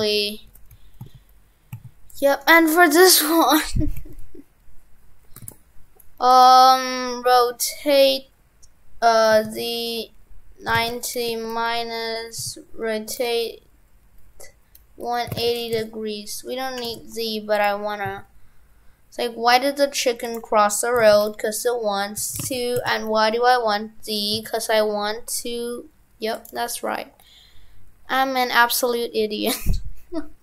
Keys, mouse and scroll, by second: 2.4 right click, 2.5 right click, 5.4 shift+f, 17.0 shift+f.